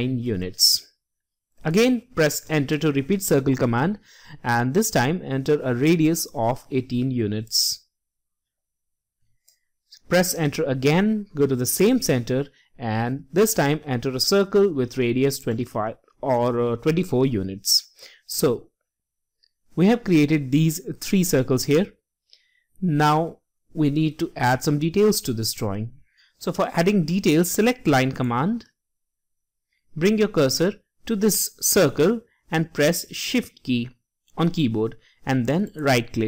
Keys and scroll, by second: 6.2 typing.